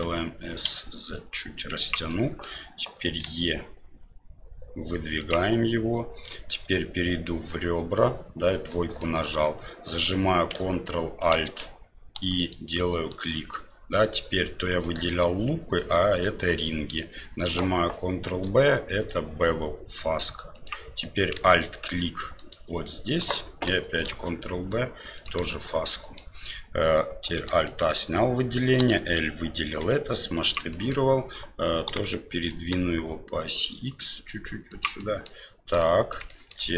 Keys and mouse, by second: 2.2 middle click, 3.2 e, 6.3 2, 8.7 middle click, 12.3 ctrl+alt+right click, 13.5 middle click, 14.8 middle click, 16.5 middle click, 22.3 alt+right click, 24.0 ctrl+b, 25.9 click, 27.4 alt+a, 27.6 middle click, 29.8 s, 30.8 middle click, 31.9 g, 35.1 middle click, 35.9 middle click, 36.4 shift+middle click.